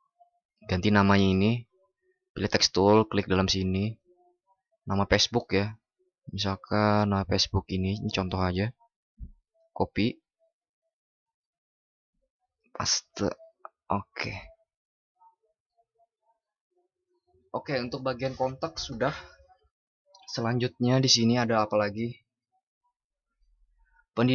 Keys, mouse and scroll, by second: 4.4 ctrl+shift+@, 8.6 ctrl+?, 9.5 ctrl+shift+b.